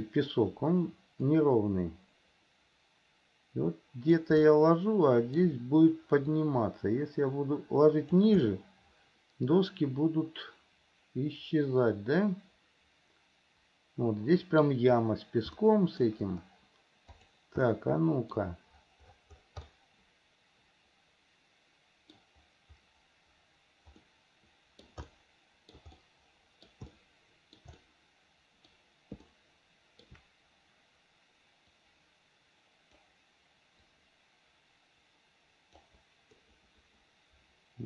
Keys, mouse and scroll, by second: 1.4 click, 2.1-4.4 drag, 4.7 shift+middle click, 6.5 click, 6.9-8.5 drag, 8.7-14.8 middle drag, 15.7 shift+middle click, 17.2 click, 17.9 middle click, 19.9-22.4 middle drag, 24.2 middle click, 25.3 shift+middle click, 26.2 middle click, 27.1 shift+middle click, 28.0 middle click, 29.4 shift+middle click, 31.9 click, 32.3-33.3 drag, 34.0 click, 34.4-36.1 drag, 36.5-37.8 middle drag.